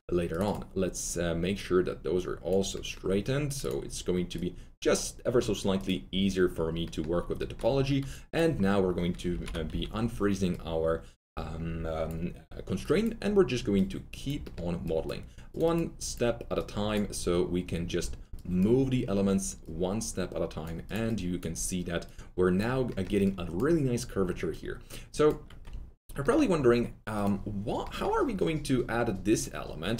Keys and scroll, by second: 9.2 shift+x, 9.6 shift+w, 25.6 shift+x.